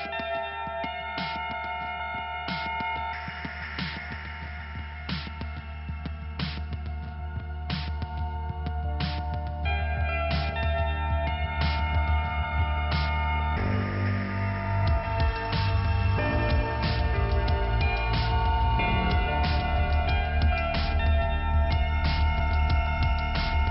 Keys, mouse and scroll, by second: 0.0 click, 0.2 click, 3.7 click, 7.4 click, 11.1 click, 12.6-13.6 scroll up 2, 13.6 click, 14.5 scroll up 2, 15.7 click, 16.2 click, 16.7 right click, 17.2 click, 18.3 click, 19.0 click, 20.2 click, 21.2 click, 21.7 click, 22.4 click.